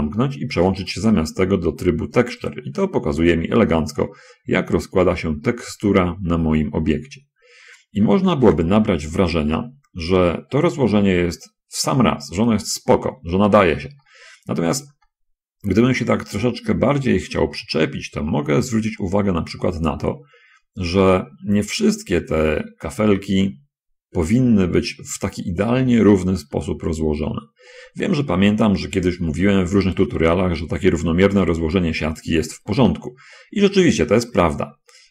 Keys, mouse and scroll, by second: 2.5 click, 3.4-3.8 scroll down 1, 4.1 click, 5.2-6.7 drag, 6.9-7.9 drag, 8.3 middle click, 8.3 scroll, 8.7 shift+space, 9.5 shift+middle click, 9.5 shift+scroll, 10.0-11.3 middle drag, 11.4-12.7 middle drag, 13.1-14.2 middle drag, 14.4-15.4 middle drag, 15.8-21.1 drag, 21.5 click, 21.7-26.2 middle drag, 26.6-27.9 middle drag, 28.1-29.5 middle drag, 29.6-30.7 middle drag.